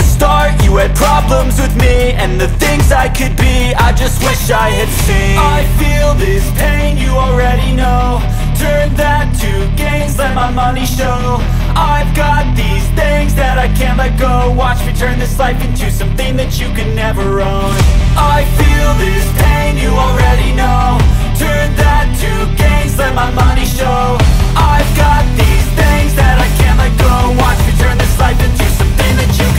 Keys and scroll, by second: 1.6 Return, 5.1 space, 12.1 r, 13.3 space, 13.6 p, 14.7 Return, 15.4 1, 16.0 Return, 17.9 space, 18.3 p, 19.3 space, 21.3 r, 22.7 space, 23.1 p, 24.1 Return, 27.2 Return, 27.7 space, 28.5 m.